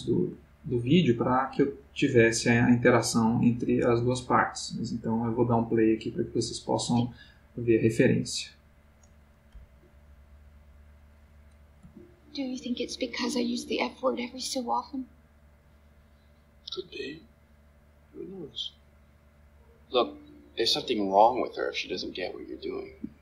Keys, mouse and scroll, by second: 6.7-7.6 drag, 9.5 Right, 11.8 space, 22.8 Escape.